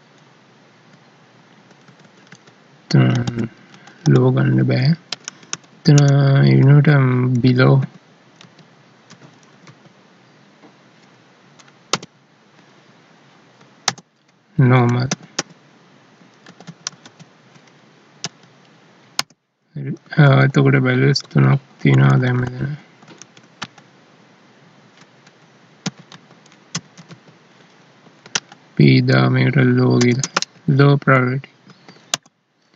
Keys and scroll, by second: 0.9 Down, 3.1 ctrl+Left, 12.1 alt+e, 18.2 Right, 19.1 End, 20.1 ctrl+s, 21.2 Down, 21.8 ctrl+Left, 23.2 ctrl+shift+Right, 28.3 ctrl+shift+Left, 31.6 ctrl+s, 32.1 End.